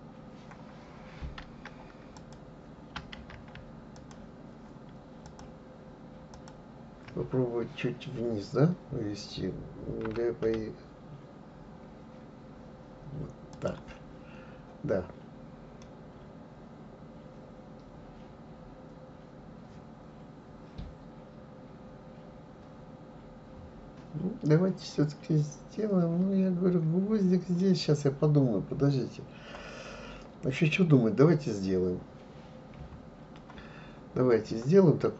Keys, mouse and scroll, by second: 2.2 click, 3.9 shift+click, 5.2 shift+click, 6.3 shift+click, 10.0 g, 15.8-18.8 middle drag, 32.8 KP_3.